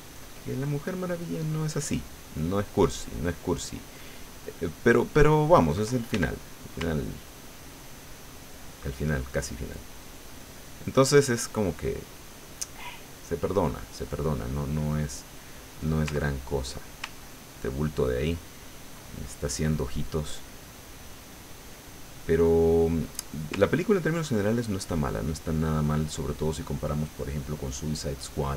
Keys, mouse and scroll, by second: 6.1 ctrl+f, 6.5 ctrl+click, 6.9-11.2 ctrl+drag, 11.3-12.8 ctrl+middle drag, 13.6-15.1 middle drag, 15.4 middle click, 16.2 ctrl+middle click, 17.2-19.0 ctrl+drag, 19.1 ctrl+click, 19.1 ctrl+middle click, 20.2 middle click, 21.2 middle click, 22.3-23.3 middle drag, 23.6-26.1 ctrl+drag, 28.1 click.